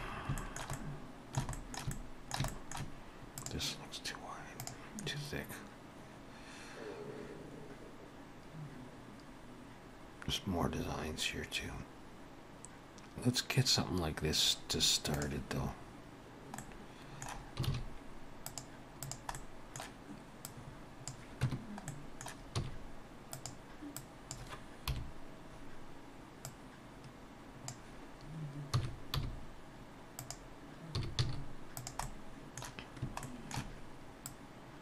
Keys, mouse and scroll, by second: 0.0-0.4 scroll up 3, 0.4 shift+middle click, 0.8 middle click, 1.6 shift+middle click, 2.0 middle click, 2.5 shift+middle click, 3.4 click, 16.6 middle click, 17.7 shift+a, 19.4 middle click, 20.5 click, 21.5 Tab, 21.9 middle click, 22.6 s, 24.0 click, 24.9 KP_7, 26.5 click, 28.8 s, 31.1 s, 32.0 middle click, 33.3 shift+middle click, 34.3 click.